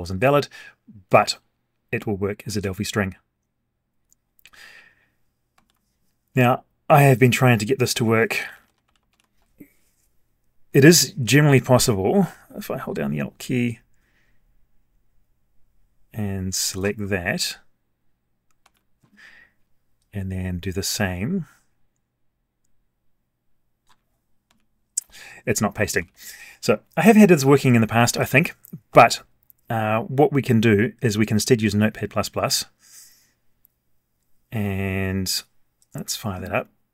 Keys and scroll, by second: 5.5 ctrl+c, 9.1 ctrl+v, 18.6 ctrl+x, 24.4 ctrl+v, 26.0 ctrl+z.